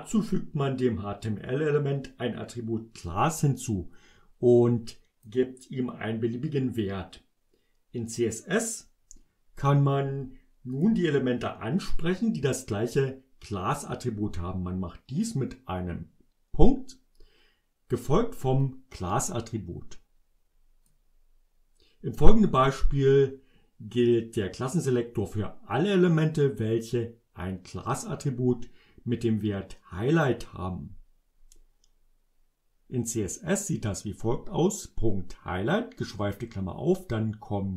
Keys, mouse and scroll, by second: 3.1-5.5 drag, 10.9 click, 18.7-21.1 drag, 33.6 click.